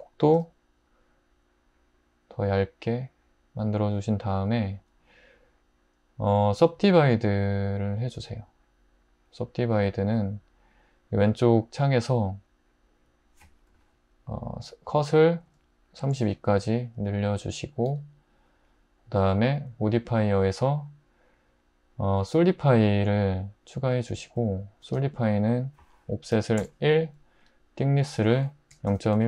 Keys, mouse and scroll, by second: 0.4 y, 15.4 typing, 16.0 Return, 17.9 Tab, 26.3 typing, 28.5-29.2 typing.